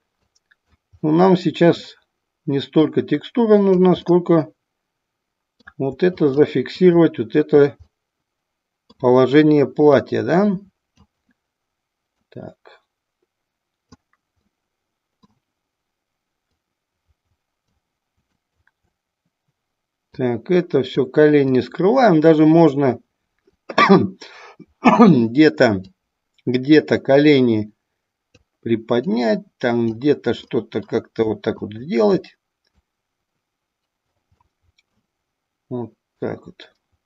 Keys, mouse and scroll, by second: 0.3 click, 0.9 middle click, 2.9 click, 4.1-5.6 middle drag, 6.2 click, 6.7 click, 7.9-9.1 middle drag, 10.0 click, 12.1-14.0 drag, 14.5 middle click, 16.4-17.7 drag, 18.4 click, 20.1 click, 21.6-22.7 drag, 23.5 click, 26.0-28.5 drag, 29.0 click, 30.5 middle click, 31.6 click, 32.8-34.4 drag, 34.5 middle click, 36.2-37.0 drag.